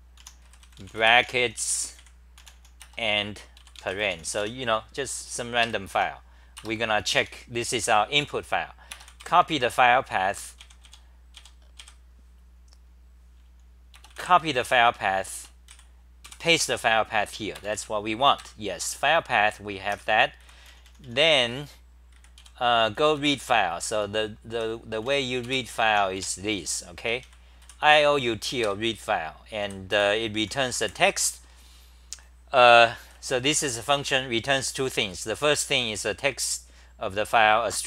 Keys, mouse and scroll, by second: 1.4-2.9 typing, 5.6 Home, 5.6 ctrl+g, 5.9 t, 6.5 Return, 7.2 Home, 10.6 `, 11.4 `, 11.8 `, 14.6 w, 16.2 k, 18.4 ctrl+g, 18.7-27.9 typing, 28.6 ctrl+g, 29.4-31.3 typing, 34.0 ctrl+g, 34.1-35.5 typing, 37.3-37.8 scroll down 9.